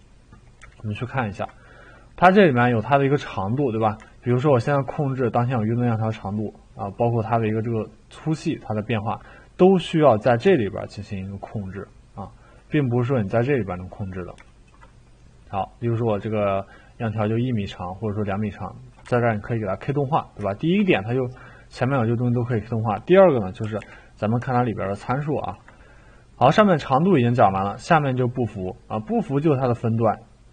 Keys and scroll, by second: 23.4-25.5 typing.